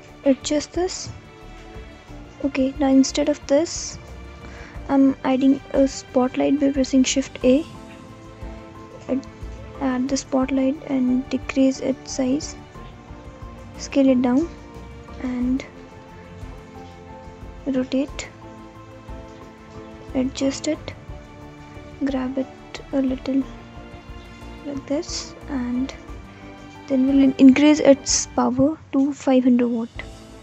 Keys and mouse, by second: 4.9 Delete, 5.9 shift+a, 8.6 alt+middle click, 9.5-11.0 alt+middle drag, 13.3 g, 14.5 z, 17.1-17.5 alt+drag, 17.5-18.5 alt+middle drag, 18.7 r, 21.4 g, 21.9 x, 23.1 z, 26.4-30.4 drag, 30.2 0.